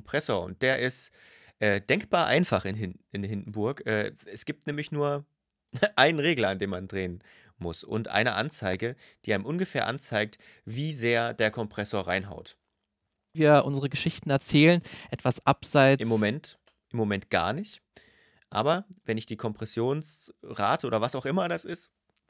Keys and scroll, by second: 13.1 space, 16.1 space.